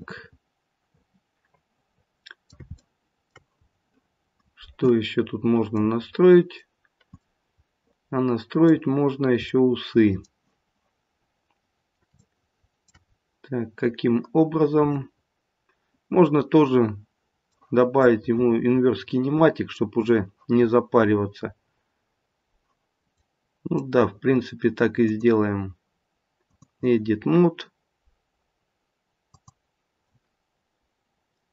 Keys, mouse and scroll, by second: 2.8 shift+middle click, 3.6-5.1 scroll up 4, 5.1-5.7 scroll down 1, 5.7 middle click, 5.7-6.2 scroll down 1, 7.2 middle click, 9.5 middle click, 10.9-12.1 scroll down 2, 12.2 shift+middle click, 13.1-13.6 scroll up 2, 14.9 middle click, 15.8 middle click, 18.0 middle click, 23.2 middle click, 23.6 middle click, 25.1 click, 29.2 click.